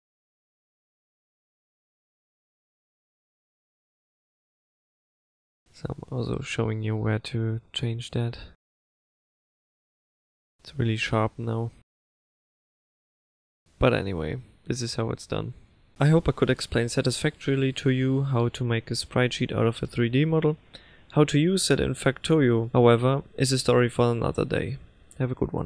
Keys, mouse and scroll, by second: 6.5 click, 7.5 click, 9.4 click.